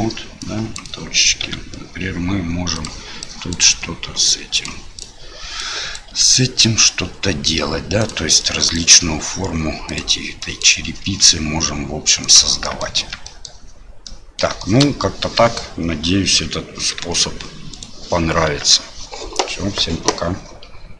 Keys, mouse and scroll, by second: 0.5 click, 1.4 s, 3.2 click, 3.6 s, 5.7 click, 8.5 click, 10.5 click, 11.0 s, 12.5 middle click, 13.0 Tab, 13.2 middle drag, 14.0-14.4 middle drag, 14.6 shift+middle click, 15.3 middle click, 17.0 Tab, 17.7 right click, 18.4 Tab.